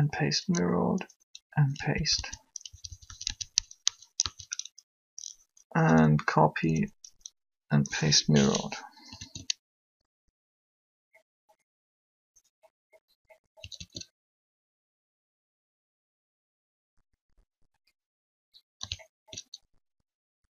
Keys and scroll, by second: 0.1 Up, 1.9 Down, 2.7 Right, 6.6 Up, 9.2 alt+a, 13.6 alt+a.